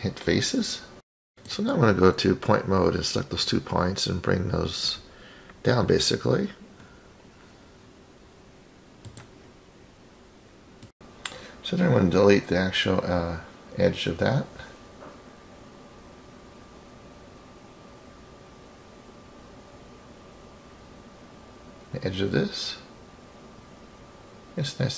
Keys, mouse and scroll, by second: 1.4 click, 2.0 click, 4.2 click, 5.8-9.3 drag, 10.6 click, 11.0 click, 11.6 click, 13.3 Delete, 15.9-16.8 scroll up 5, 16.8 scroll up 2, 17.0-18.0 scroll down 5, 18.0 scroll down 1, 18.2 click, 21.4-22.1 scroll down 3, 22.1 click, 23.2 click.